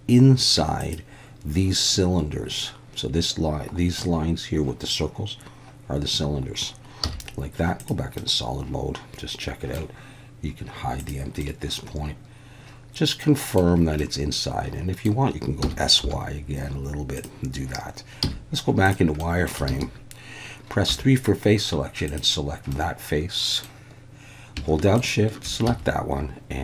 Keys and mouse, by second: 0.8 click, 7.0 z, 8.3-9.8 middle drag, 11.4-13.6 middle drag, 14.1-15.1 middle drag, 15.6 s, 16.0 y, 17.2 click, 18.2 z, 19.3 middle click, 19.7 alt+a, 20.9 3, 22.7 middle click, 25.0 shift+click, 25.7 x.